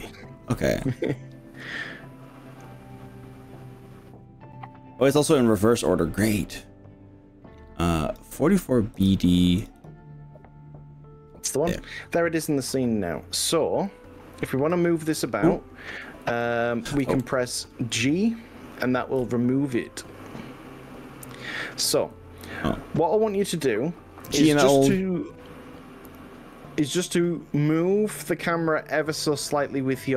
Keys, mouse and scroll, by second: 13.9 click, 16.3 ctrl+z, 17.1 ctrl+z, 19.3-22.1 g, 22.5 g, 23.5 click, 24.3 g, 26.7 click, 28.3 g.